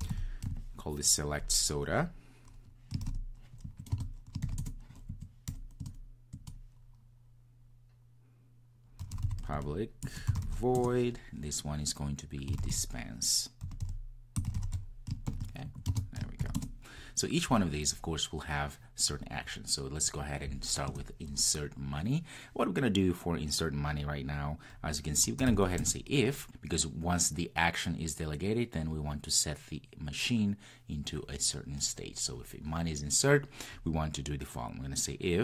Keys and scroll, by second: 10.0 Return, 25.8 Return.